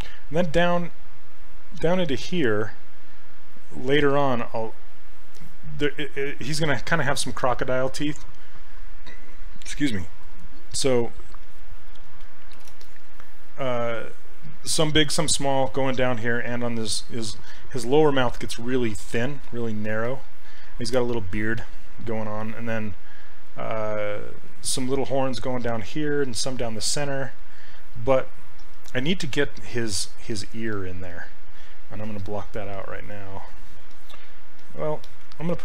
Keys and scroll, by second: 12.6 shift+f.